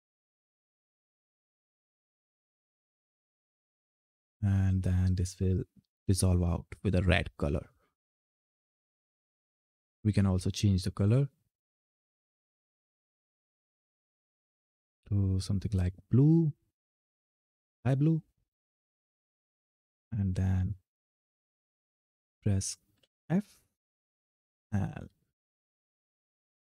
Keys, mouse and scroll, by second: 0.1 click, 1.8 ctrl+F10, 3.1 f, 10.6 click, 15.5 click, 21.3 ctrl+F10, 22.7 f.